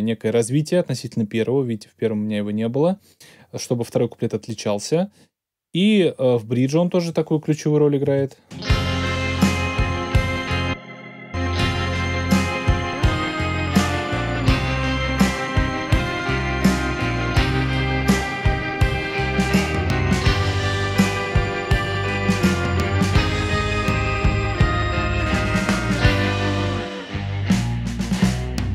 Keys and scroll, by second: 8.0 space.